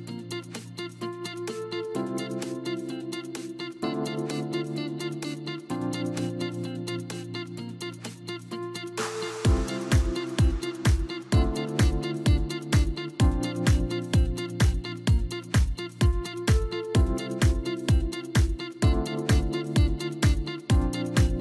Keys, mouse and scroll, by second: 2.7-3.0 scroll down 2, 3.0-4.2 middle drag, 4.2 scroll up 1, 6.8-10.8 drag, 16.4-18.8 drag, 18.8-19.8 scroll down 1, 19.8 click, 20.6-21.4 scroll down 7.